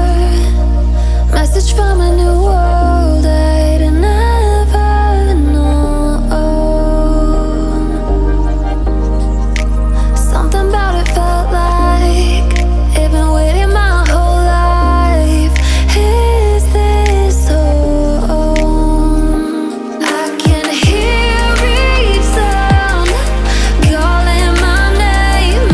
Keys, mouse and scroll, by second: 0.3-1.8 drag, 1.8 alt+scroll down 1, 2.1-5.2 drag, 5.2-5.5 alt+scroll up 1, 5.7 alt+shift+click, 7.1 ctrl+shift+], 7.6 alt+scroll down 1, 7.9-10.2 drag, 10.2 alt+scroll down 1, 10.6 ctrl+shift+], 11.1 click, 11.5 alt+scroll down 1, 12.2 alt+scroll up 1, 13.3 alt+scroll down 1, 14.0-14.5 alt+scroll up 1, 14.5 alt+scroll down 1, 15.0-15.4 alt+scroll up 1, 16.0-16.4 alt+scroll down 1, 16.8 click, 18.2 alt+scroll up 1, 20.2 click, 23.3-23.9 alt+scroll up 1, 24.2 click, 24.4 alt+scroll down 1, 24.5 alt+scroll up 1, 24.7 click.